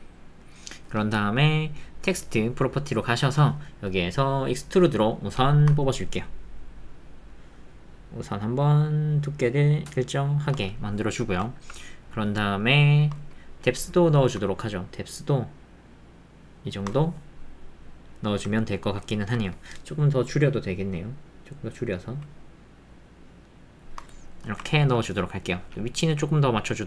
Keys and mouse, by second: 11.1 shift+middle click, 11.5 ctrl+middle click, 11.8 middle click, 12.6 shift+middle click, 17.2-18.3 middle drag, 18.3 alt+click, 24.8 ctrl+middle click, 26.1 g.